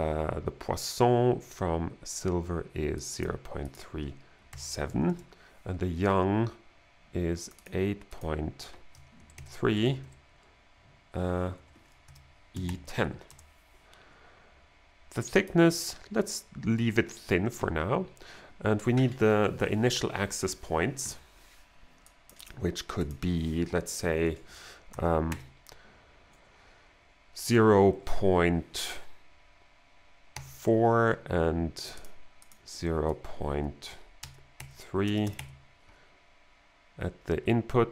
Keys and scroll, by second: 4.5 7, 5.1 Return, 5.6 Return, 9.2 Right, 9.3 3, 9.6 Right, 11.6 Left, 12.0-13.1 typing, 13.3 Return, 24.9 BackSpace, 30.4 4, 34.2 BackSpace, 34.6 3, 35.0 BackSpace, 35.3 3.